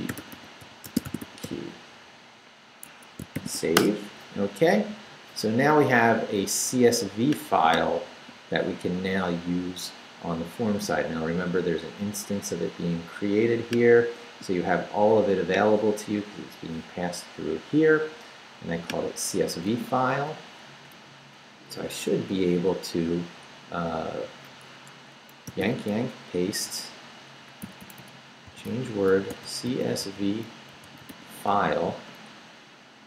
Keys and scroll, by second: 0.0-1.9 typing, 2.9 Escape, 3.1-4.0 typing, 21.1 shift+Down, 21.5 Up, 22.1 Up, 24.7 Escape, 25.5 y, 25.9 shift+p, 26.7 Right, 27.5 Right, 28.2-31.6 typing, 32.5 Right.